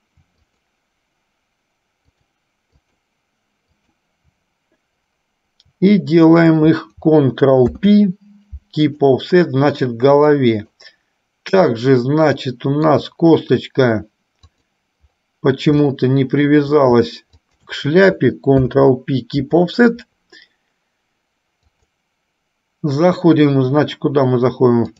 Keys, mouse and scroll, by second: 0.6 shift+click, 2.3-3.3 shift+drag, 6.4 shift+click, 7.9 ctrl+p, 10.5 middle click, 11.9-13.0 middle drag, 14.5 click, 16.0 shift+middle click, 17.5 shift+click, 18.8 ctrl+p, 21.9-24.9 drag.